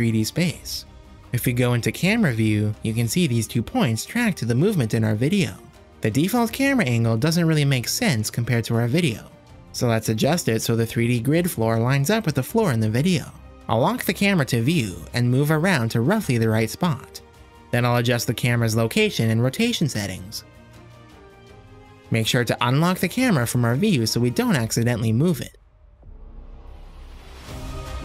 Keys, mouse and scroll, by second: 1.9 KP_0, 4.4-5.9 drag, 6.9 Home, 9.5 click, 11.0 click, 11.8-15.3 middle drag, 16.4 click, 17.2 click, 18.0 click, 19.3-21.0 drag, 21.4-22.6 drag, 23.8 click, 24.3 middle drag, 25.0-26.1 middle drag, 26.5 KP_0.